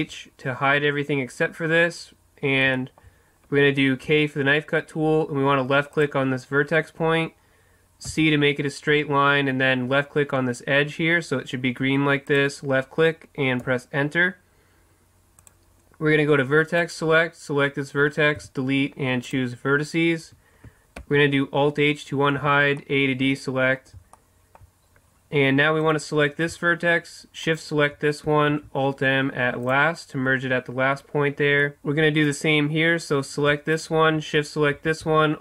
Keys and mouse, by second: 2.8-6.0 middle drag, 4.2 k, 15.5-16.7 middle drag, 16.7 click, 18.5 Delete, 21.2 alt+h, 22.5 a, 25.8-27.3 right drag, 28.5 alt+m, 32.2-35.4 right drag, 34.9 alt+m.